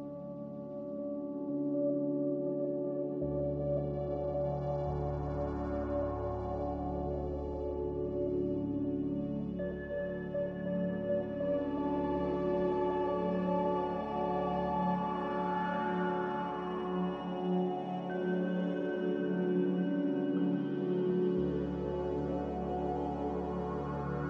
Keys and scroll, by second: 2.8 b, 6.9 m, 10.2 b, 14.4 a, 20.2 ctrl+g, 23.3 ctrl+j.